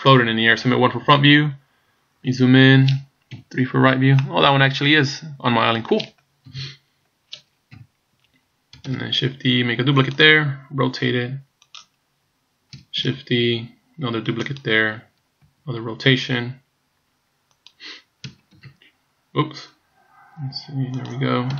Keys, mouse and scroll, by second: 1.0 KP_1, 1.8-2.3 scroll up 6, 3.4 KP_3, 4.2 middle click, 6.4 KP_1, 7.7 KP_7, 8.9 shift+d, 10.9 r, 12.0 scroll down 3, 13.2 shift+d, 15.5 r, 18.6 shift+r, 20.4 r.